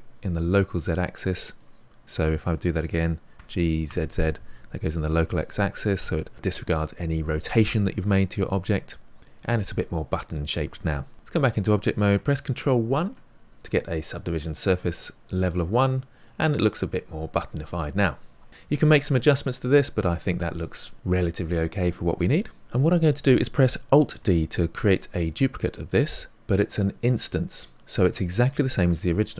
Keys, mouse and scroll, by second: 1.5-3.3 middle drag, 3.3 g, 9.3-11.1 middle drag, 11.1 Tab, 12.8 ctrl+1, 15.3-18.3 middle drag, 18.5 Tab, 19.0-19.7 scroll down 3, 19.7-22.1 middle drag, 24.2 alt+d.